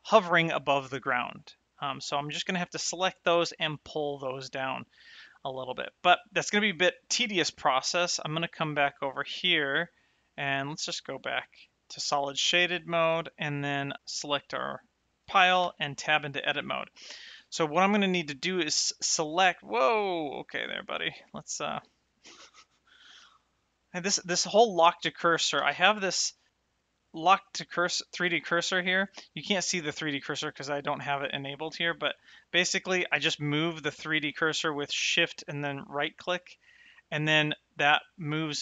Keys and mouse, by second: 1.7 middle click, 6.4 click, 7.7 shift+middle click, 8.7 shift+middle click, 10.6 click, 13.7 click, 15.6 Tab, 17.0 shift+middle click, 18.2 middle click, 20.2 shift+right click, 20.5 shift+middle click, 23.2 shift+middle click, 26.5 click, 30.3 click, 31.5 click, 35.3 shift+right click, 36.2 shift+right click, 36.8 shift+right click, 37.5 shift+right click, 38.0 shift+right click.